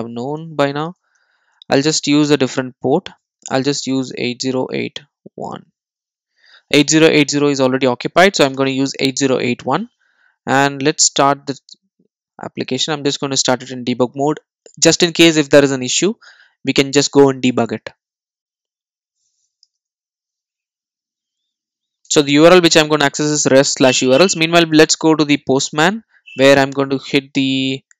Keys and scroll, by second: 6.3 super+s, 11.5 ctrl+d, 19.7 super+e.